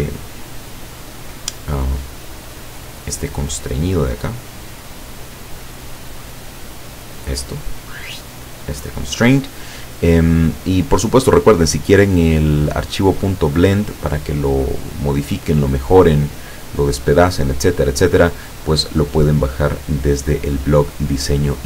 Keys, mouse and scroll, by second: 2.4-3.4 drag, 5.1 click, 5.9-7.2 drag, 10.3-11.3 drag, 12.2-13.2 drag, 14.1-14.9 drag, 16.2 click, 17.6-21.6 drag.